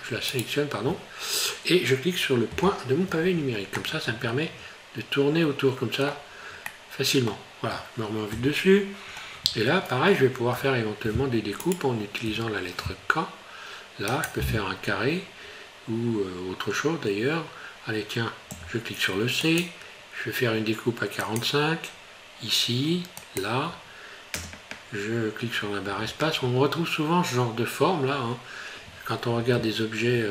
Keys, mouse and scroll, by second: 0.3 right click, 2.5 KP_Decimal, 3.8 middle click, 6.7 middle click, 8.3 KP_7, 9.2-9.6 scroll up 1, 10.6 i, 12.3 k.